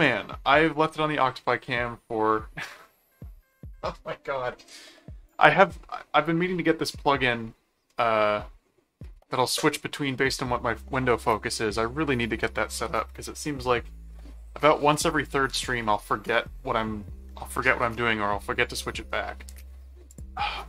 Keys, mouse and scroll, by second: 0.0 click, 15.0 click, 20.1 click.